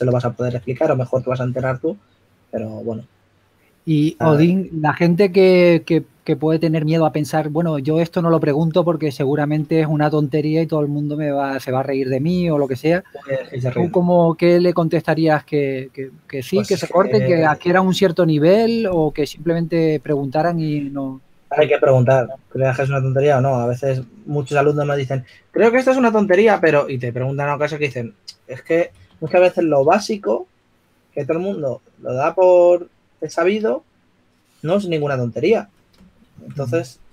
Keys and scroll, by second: 0.0-1.8 typing, 8.4 2, 11.0 2, 12.1-12.9 typing, 14.8 typing, 17.8 2, 19.8-21.2 typing, 22.6 2, 29.6-30.4 typing.